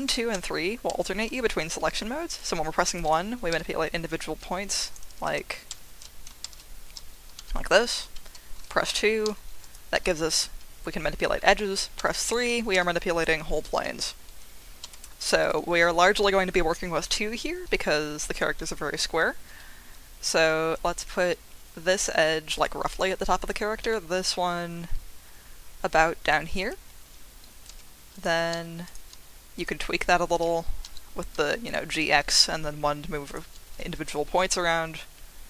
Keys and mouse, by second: 0.0-1.8 typing, 2.8 click, 3.5 f, 4.8 click, 5.3 ctrl+super+z, 7.4 g, 8.0 Escape, 8.9 2, 9.6 click, 9.9 g, 11.4 Escape, 12.0 3, 12.7 g, 13.7 Escape, 14.8 2, 15.4 click, 19.5 g, 22.5 click, 23.8 g, 26.6 click, 27.7 1, 28.1 click, 30.8 g, 31.2 x, 33.2 click.